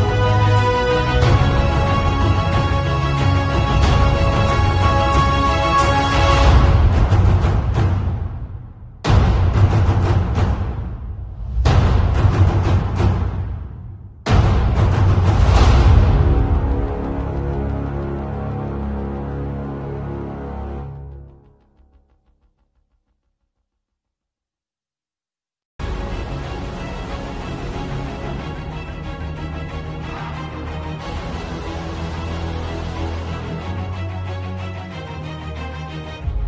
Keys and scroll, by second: 0.0 z, 0.4 space, 0.9 b, 1.3 ], 2.4-5.1 typing, 6.7 v, 7.7-9.0 typing, 10.5-15.7 typing, 17.8 b, 18.3 ], 19.7 x, 23.6 z, 24.5 space, 25.2 b, 25.8 [, 27.3 [, 29.3 [, 34.1 z, 35.4 v.